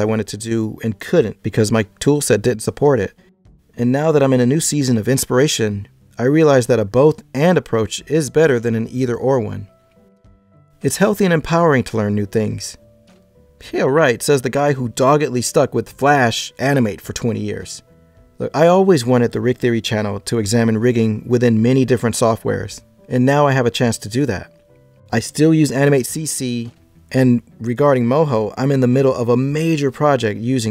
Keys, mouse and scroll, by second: 18.4 Tab, 18.6 scroll up 6, 19.0 click, 19.1 e, 19.4 shift+middle click, 19.8 e, 21.6 click, 21.8 g, 22.4 e, 23.5 click, 24.1-24.6 scroll down 2, 24.6 shift+middle click, 25.2 click, 26.6 right click, 27.2 g, 28.0 shift+middle click.